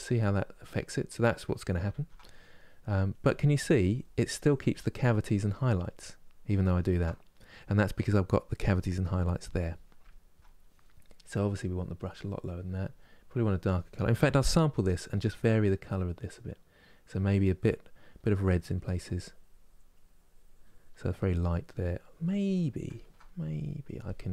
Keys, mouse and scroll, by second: 0.8 middle click, 1.6 ctrl+z, 2.8-5.3 drag, 5.3-6.5 middle drag, 6.5 ctrl+z, 7.0-11.2 middle drag, 11.2-17.3 drag, 17.3 middle click, 18.0-20.9 drag, 20.9 middle click, 21.4 click, 21.9-24.3 middle drag.